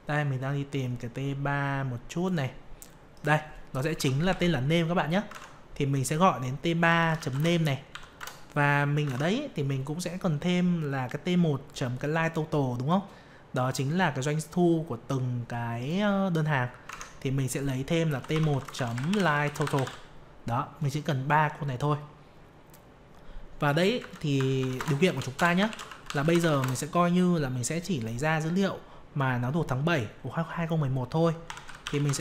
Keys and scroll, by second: 5.3 alt+Tab, 16.8 alt+Tab.